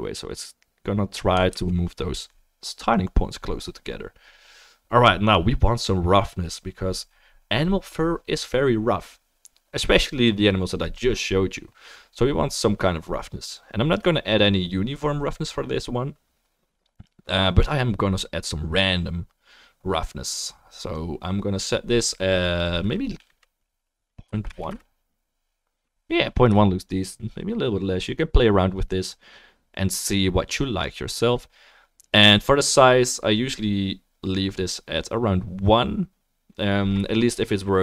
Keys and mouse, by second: 1.6 ctrl+z.